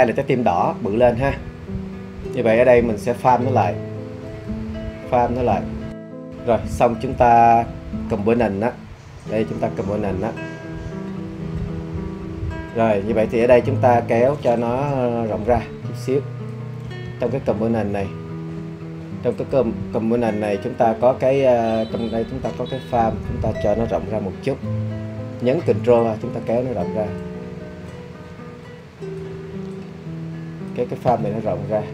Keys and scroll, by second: 17.1 super+z.